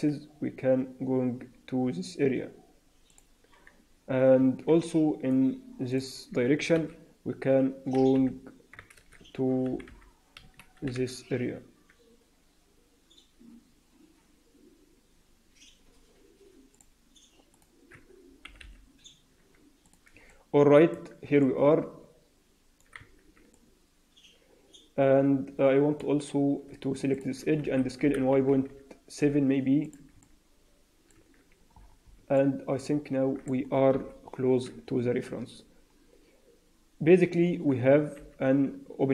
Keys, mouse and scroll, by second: 3.9 Tab, 4.3 Tab, 4.8 alt+middle click, 5.8 click, 6.7 KP_3, 8.1 h, 8.9 ctrl+z, 9.6 g, 10.7 g, 17.4 click, 18.3 g, 20.2 alt+middle click, 20.9 Tab, 21.3 middle click, 22.9 Tab, 23.5 middle click, 27.1 click, 27.5 s, 30.1 middle click, 31.1 Tab, 31.7-32.1 scroll down 6, 32.3 alt+middle click, 33.8 KP_1, 34.3-34.8 scroll up 2, 34.8-36.9 scroll up 4, 38.1 h.